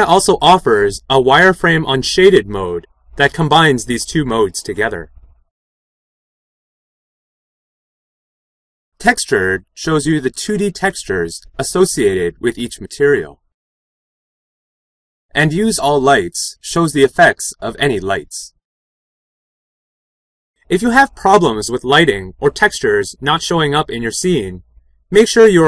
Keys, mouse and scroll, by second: 8.3 6, 14.9 7.